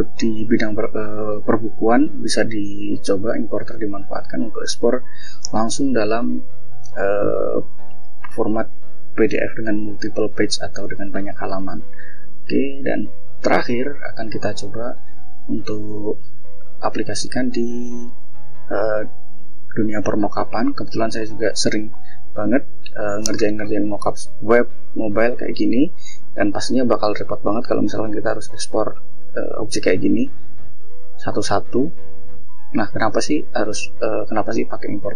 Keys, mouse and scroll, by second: 2.4 click, 4.3 click, 5.8 click, 7.0 click, 8.2 click, 9.6 shift+scroll down 2, 10.8 ctrl+s, 11.4 ctrl+click, 12.6 click, 13.7 click, 14.2 scroll up 3, 15.0 scroll down 2, 16.3-17.1 scroll down 4, 17.4 scroll up 2, 17.9-18.6 scroll down 4, 19.0 scroll down 2, 19.9-20.6 scroll down 4, 21.1 scroll down 2, 21.9-23.1 scroll up 6, 23.9-25.4 scroll up 6, 25.7 click, 26.4 click, 27.2 click, 28.3 click, 28.9 click, 29.9 click, 30.4-31.2 scroll down 4, 31.4-32.5 scroll up 3, 32.5 click, 34.3 click, 34.9 click.